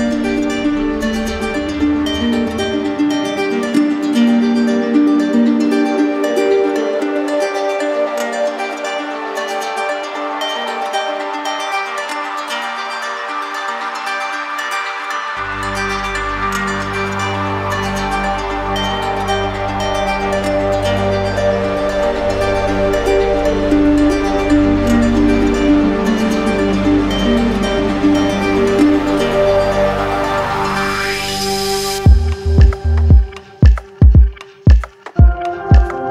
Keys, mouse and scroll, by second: 0.5 click, 1.8 click, 3.6 click, 4.6 click, 5.2 shift+click, 6.1 click, 6.7 alt+click, 8.0 click, 9.0 right click, 10.2 right click, 11.2 click, 12.7 click, 13.3 click, 14.3 alt+click, 14.9 alt+click, 15.0 shift+click, 16.8 w, 20.5 click, 24.1 click, 25.5 click, 27.6 click, 28.1 shift+click, 29.4 click, 29.8 shift+click, 30.4 click, 31.9 click, 34.0 click.